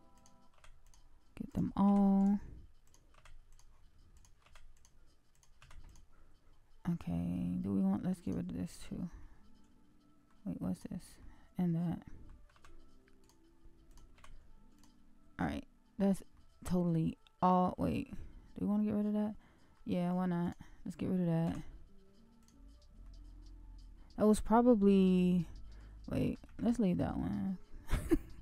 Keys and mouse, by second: 0.1 click, 0.5 x, 1.4 click, 1.8 x, 3.1 x, 4.4 x, 5.3 click, 5.5 x, 9.2-10.2 middle drag, 10.7 click, 11.1-12.2 middle drag, 12.5 x, 14.1 x, 16.3-19.7 middle drag, 20.4 click, 21.4 x, 23.0-25.7 middle drag, 26.7 ctrl+z, 27.2-28.4 middle drag.